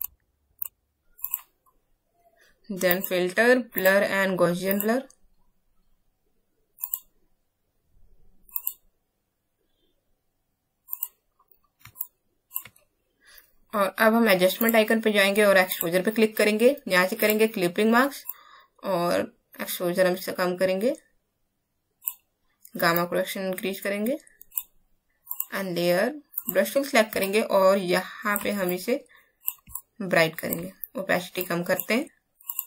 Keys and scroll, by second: 11.9 space.